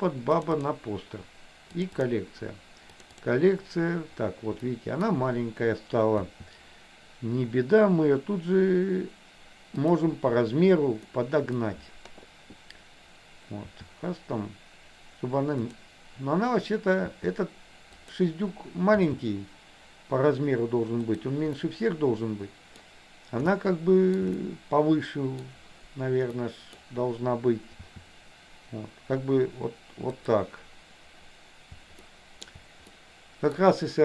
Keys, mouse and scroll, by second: 4.7 middle click, 6.3 s, 11.2 middle click, 13.7 s, 17.1 s, 19.0 g, 21.7-22.8 middle drag, 22.8 scroll down 1, 23.7 shift+middle click, 24.4-25.5 middle drag, 25.5 scroll down 1, 26.4 middle click, 27.9 s, 32.2 shift+middle click, 33.0 scroll up 1, 33.2 middle click.